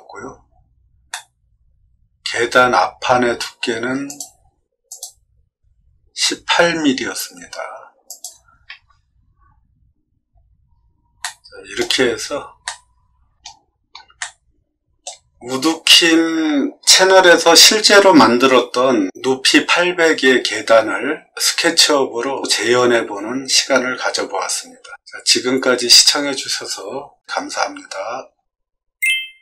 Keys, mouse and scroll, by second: 1.0-2.2 middle drag, 4.0 click, 4.8 click, 8.0 click, 10.6 middle click, 10.6 scroll down 2, 10.7 middle click, 11.2 middle click, 12.2 shift+middle click, 12.6 shift+middle click, 14.1 shift+middle click.